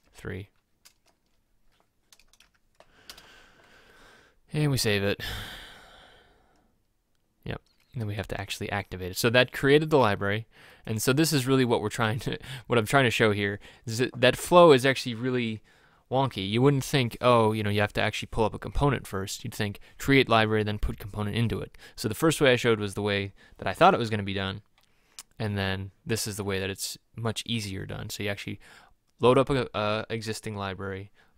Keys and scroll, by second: 0.1 shift+Left, 2.5 3.